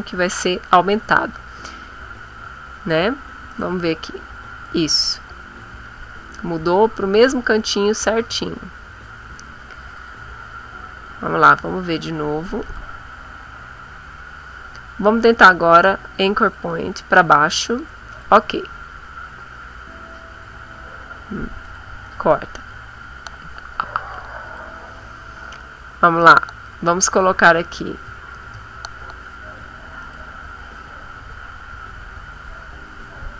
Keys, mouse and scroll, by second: 3.5 click, 8.2 ctrl+z, 9.9 click, 12.6 click, 16.4 click, 18.1 click, 21.7 click, 24.5 click, 26.7 click, 28.1 KP_5, 28.4 KP_0, 30.0 click.